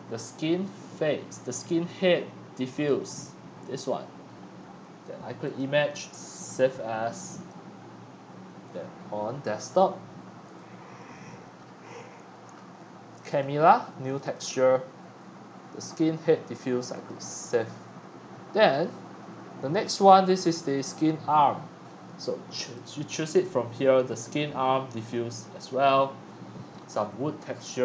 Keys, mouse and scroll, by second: 0.6-1.0 scroll, 2.9-11.6 drag, 13.4-17.8 drag, 17.8 middle click, 17.9-19.2 scroll down 4, 18.8 middle click, 19.2 scroll up 3, 19.7-22.1 middle drag, 22.1-22.7 scroll up 2, 22.7-25.9 drag, 26.0-26.7 scroll up 6, 26.9 click.